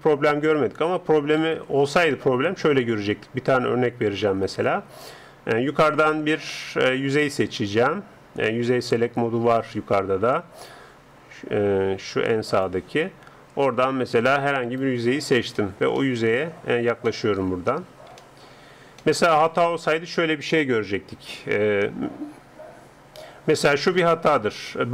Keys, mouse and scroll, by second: 1.4 ctrl+Up, 12.5-14.7 drag, 14.7 right click, 15.6-21.0 middle drag, 21.0 s, 24.7-24.9 middle drag.